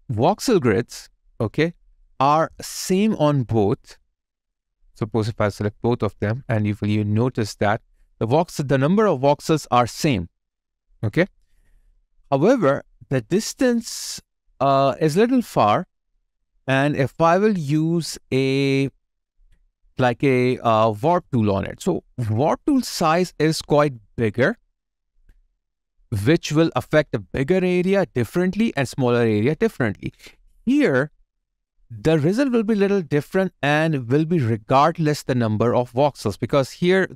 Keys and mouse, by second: 5.2 shift+click, 7.8 alt+right click.